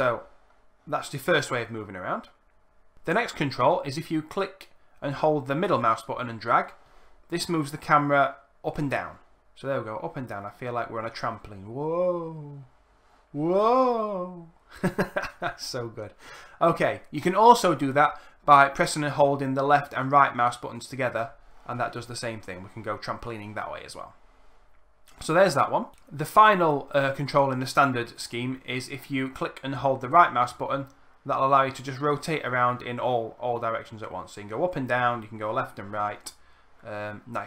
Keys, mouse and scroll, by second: 5.5-14.3 middle drag, 14.5 middle click, 19.6-26.5 drag, 19.6-26.5 right drag, 30.0-37.4 right drag.